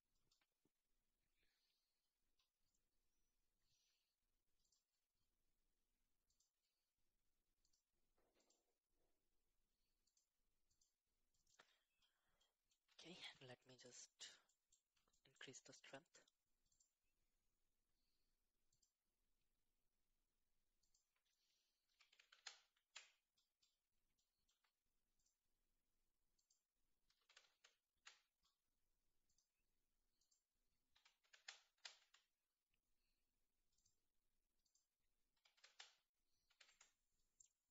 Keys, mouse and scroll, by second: 4.6 click, 6.3 click, 7.6 click, 8.4 click, 10.1 click, 11.3 middle drag, 12.4-12.9 middle drag, 12.9-13.8 shift+middle drag, 14.4 middle click, 15.1-16.3 shift+middle drag, 16.7-18.8 drag, 20.8-23.1 drag, 22.2 KP_0, 22.3 KP_0, 24.2 shift+middle click, 25.1 click, 26.3-28.1 drag, 27.4 KP_0, 27.5 KP_0, 29.3 click, 30.2-32.0 drag, 31.3 KP_0, 33.7-34.1 drag, 34.6-36.6 drag, 35.6 KP_0.